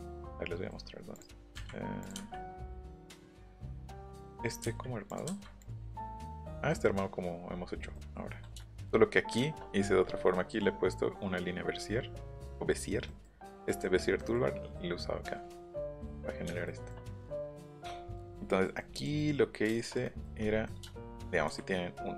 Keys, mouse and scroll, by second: 0.2 shift+middle click, 0.8 scroll up 1, 1.1 click, 1.3 middle click, 2.0 click, 2.7 middle click, 3.5 click, 3.9 middle click, 4.2 click, 5.1 click, 5.2 Delete, 5.6 click, 5.8 scroll up 1, 7.5 scroll down 1, 10.3 middle click, 13.1 middle click, 14.2 middle click, 16.4 shift+middle click, 16.6 shift+middle click, 17.0 middle click, 17.4 shift+middle click, 18.4 middle click, 19.0 click, 19.1 middle click, 19.7 shift+middle click.